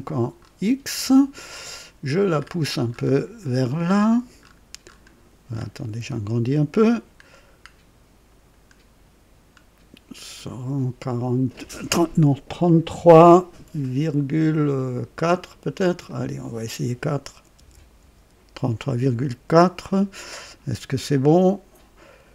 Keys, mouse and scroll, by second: 0.4 scroll up 1, 2.3-5.1 scroll up 9, 5.5 scroll up 2, 7.1 scroll up 1, 7.7 scroll down 1, 8.5 scroll down 1, 16.0 click, 17.5 BackSpace, 18.0 KP_4, 18.2 KP_4, 20.3-20.6 scroll up 1.